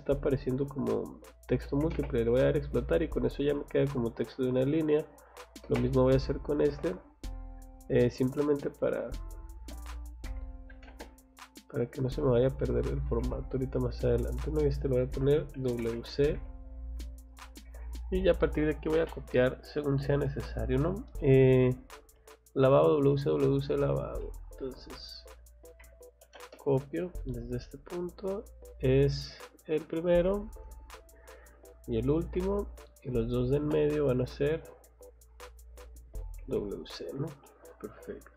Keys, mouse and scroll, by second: 0.0 click, 0.4 click, 1.8 x, 1.9 space, 2.4 click, 4.0 scroll down 2, 4.4 scroll up 2, 4.6 Escape, 4.8 click, 5.0 click, 6.2 click, 6.7 Escape, 6.9 scroll down 1, 7.2 middle click, 8.1 middle click, 8.7 click, 9.2 click, 10.7 o, 11.3 click, 13.0 click, 13.2 Escape, 13.8 click, 15.3-16.9 typing, 17.4 click, 17.6 Escape, 18.3 scroll down 2, 19.4 middle click, 19.7 scroll down 1, 20.2 middle click, 21.0-21.8 scroll up 1, 23.0 scroll down 1, 23.3 middle click, 23.8 scroll up 1, 24.2 middle click, 24.9 click, 25.8 c, 26.2 o, 26.5 space, 27.3 click, 29.1-29.8 scroll up 1, 29.8 click, 30.0 scroll down 1, 30.9 scroll up 1, 31.8 click, 32.1 scroll down 1, 32.9 click, 33.6 space, 34.0 click, 35.2 click, 36.2 click, 36.6 scroll down 1, 36.9 middle click, 37.4 middle click.